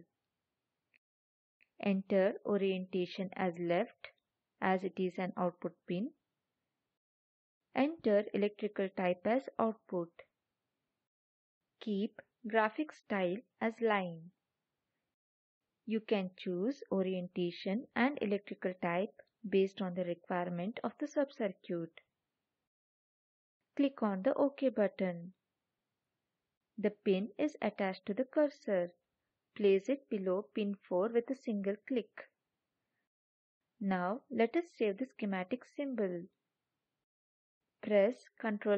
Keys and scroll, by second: 38.6 ctrl+s.